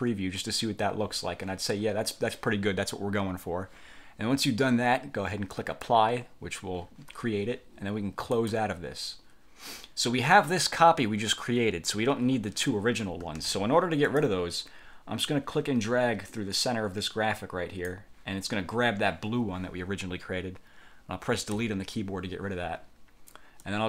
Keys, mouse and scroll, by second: 5.6 click, 8.4 click, 10.7-12.2 drag, 13.5 ctrl+z, 14.2 click, 15.4-18.2 drag, 21.7 Delete, 23.7-23.8 drag.